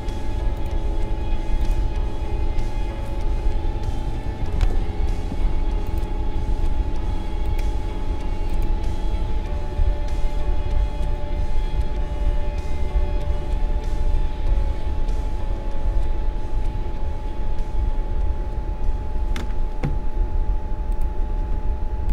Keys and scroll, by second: 3.6-4.5 typing.